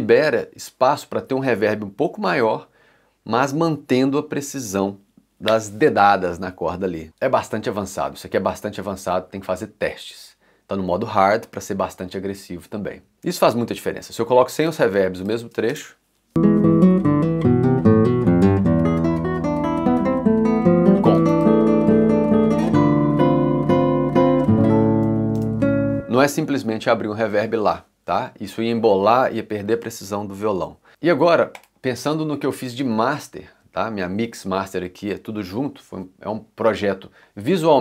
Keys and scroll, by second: 13.1 c.